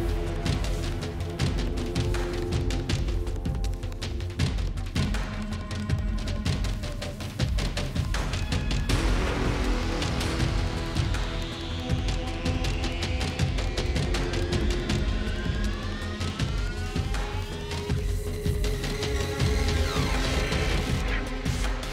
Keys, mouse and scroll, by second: 0.0-0.2 typing, 0.6 click, 1.9 alt+click, 2.1-6.0 typing, 6.3 click, 9.0 click, 9.5-10.6 typing, 10.5 click, 11.2 click, 12.4-14.6 typing, 15.9 Tab, 16.2-19.8 Tab, 16.6 typing, 17.7 Return, 18.4 space, 19.6-20.7 typing, 21.8 space.